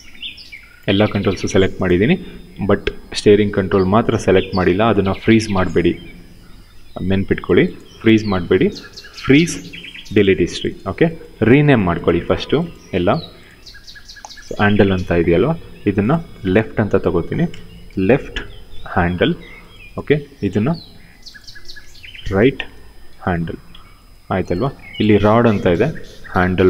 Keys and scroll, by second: 11.9 q, 14.9 ctrl+c, 17.5 shift+l, 18.1 shift+-, 18.4 ctrl+v, 21.8 shift+r, 22.2 shift+-, 22.8 ctrl+v, 24.4 q, 26.0 ctrl+c.